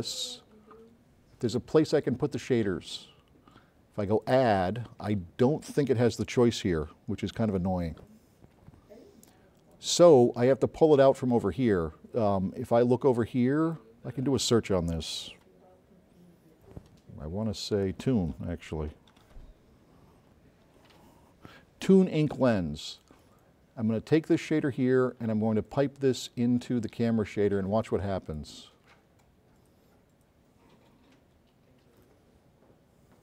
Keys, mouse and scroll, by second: 1.7 click, 4.2 click, 9.7 click, 13.7 click, 19.2 o, 20.7 n, 23.1-24.6 drag, 25.8-28.6 drag.